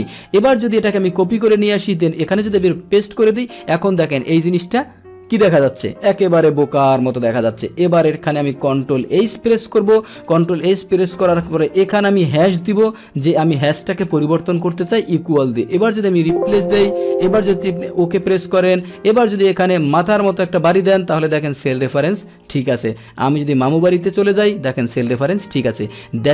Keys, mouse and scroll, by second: 1.1 ctrl+c, 2.4 ctrl+v, 2.6 ctrl+v, 9.2 ctrl+h, 11.0 click, 13.5 click, 17.4-19.2 drag, 19.9 click, 22.6 Return, 23.7 click, 25.6 Return, 25.9 Return.